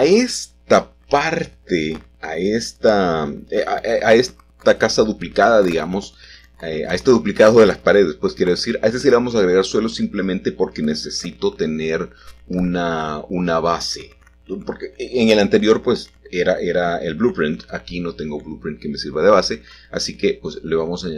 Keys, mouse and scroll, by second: 0.0 click, 0.4-1.0 scroll down 1, 1.8 click, 3.2 shift+click, 4.1 g, 4.2 y, 6.1 click, 7.7 l, 8.7 s, 9.6 x, 11.5 Escape, 14.1-17.0 shift+drag, 17.6 s, 17.8 x, 19.5 click, 20.0 g, 20.7 x.